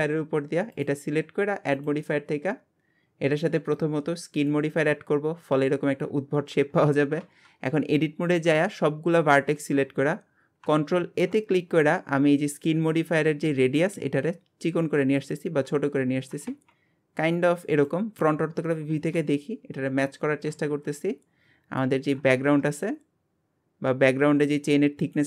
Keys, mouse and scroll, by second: 0.7 click, 4.5 drag, 5.0-6.0 scroll down 11, 6.0-6.5 scroll up 11, 7.2 Tab, 7.6 scroll up 1, 7.9 scroll down 1, 8.5 a, 9.8-11.0 scroll down 1, 11.0 ctrl+a, 15.6-16.5 scroll up 3, 16.5 ctrl+a, 18.3 KP_1, 18.9 alt+z, 19.4-19.9 scroll up 1, 19.9-20.7 scroll down 2, 20.7 KP_Divide, 21.6-22.3 scroll up 2, 22.3 ctrl+a.